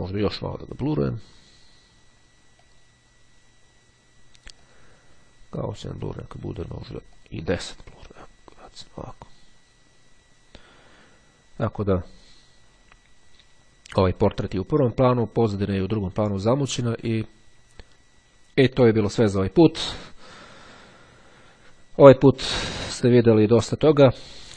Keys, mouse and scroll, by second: 2.8 click, 4.8 click, 6.6-8.1 drag, 8.8 click.